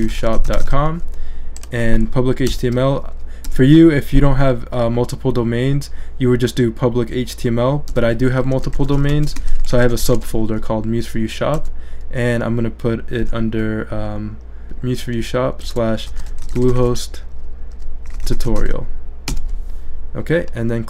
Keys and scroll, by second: 0.0-1.1 typing, 2.5 /, 3.5 BackSpace, 7.9-11.6 typing, 14.6-19.3 typing.